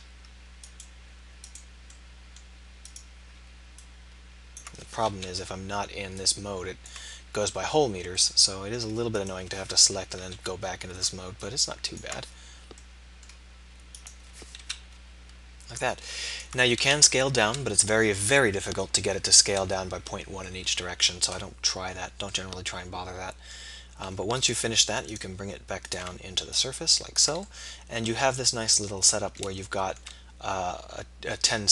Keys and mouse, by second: 2.0 middle click, 5.2 KP_7, 9.2-10.3 middle drag, 10.3 KP_7, 13.0 middle click, 14.0 middle click, 14.6 KP_7, 27.5-28.6 middle drag.